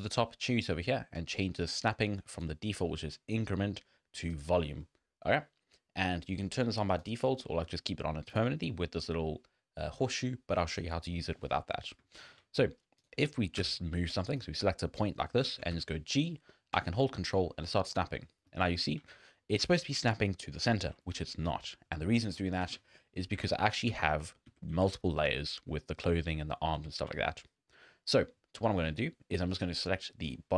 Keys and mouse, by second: 0.2-5.6 drag, 7.5 shift+click, 8.3 click, 12.1 shift+middle click, 13.6 g, 15.5 shift+middle click, 15.7 g, 18.2-18.6 middle drag, 18.7 shift+middle click, 22.6 ctrl+z, 23.4 ctrl+Tab, 23.7 click, 23.9 z, 24.2 drag, 24.5 z, 24.7 z, 25.7 click, 26.8 z, 26.9 click, 27.4 drag.